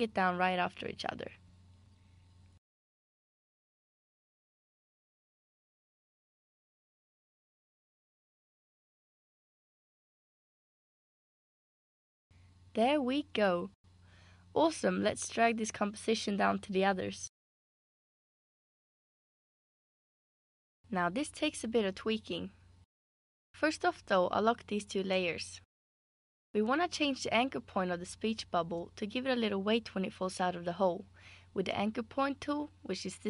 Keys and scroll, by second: 5.8 super+c, 6.0 super+d, 13.3 BackSpace.